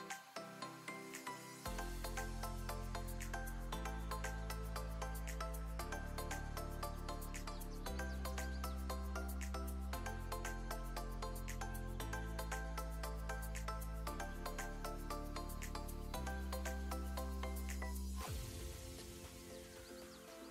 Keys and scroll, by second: 2.6 2, 3.5 0, 3.6 Return, 5.7 Delete, 7.3 Delete.